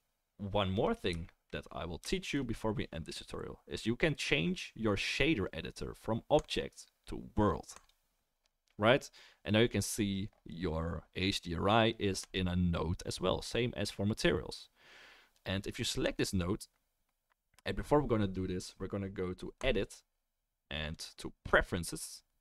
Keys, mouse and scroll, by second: 12.3-16.0 drag, 16.2-19.6 drag, 19.9-22.4 drag, 19.9-22.4 middle drag, 19.9-22.4 right drag.